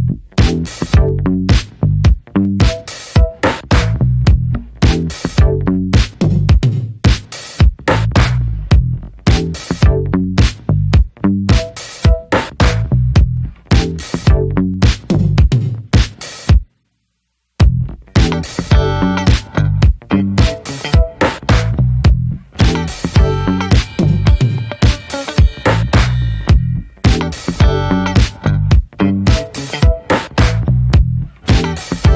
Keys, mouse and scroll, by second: 0.1-2.0 middle drag, 2.0 click, 2.4 middle click, 2.6 click, 3.1 middle click, 3.3 click, 3.7 middle click, 4.0 click, 4.3 middle click, 4.4 click, 4.9 middle click, 5.1 click, 5.6 middle click, 5.7 click, 6.1 middle click, 6.4 click, 6.6 middle click, 6.8 click, 7.2 middle click, 7.4 click, 7.7 middle click, 7.9 click, 8.2 middle click, 8.4 click, 8.8 middle click, 9.0 click, 9.5 middle click, 9.7 click, 10.3 middle click, 10.6 click, 10.8 middle click, 11.0 click, 11.5 middle click, 11.7 click, 12.7 middle click, 12.9-14.2 drag, 14.2 middle click, 14.4 click, 15.4 middle click, 15.6 click, 15.9 middle click, 16.1 click, 16.7 middle click, 16.9 click, 17.6 middle click, 18.1 click, 18.9 middle click, 19.1 click, 20.0 middle click, 20.6 click, 20.9 middle click, 21.1 click, 21.6 shift+middle click, 21.9 click, 22.2-23.7 middle drag, 23.7-26.5 drag, 26.5 middle click, 26.6-27.6 scroll up 1, 27.6-27.9 scroll up 1, 27.9 f, 28.5 click, 29.0 scroll down 1, 29.1 middle click, 29.5 click, 30.1 shift+middle click, 30.4 shift+scroll up 1, 30.6 click, 31.3 middle click, 31.5 f, 31.9 click.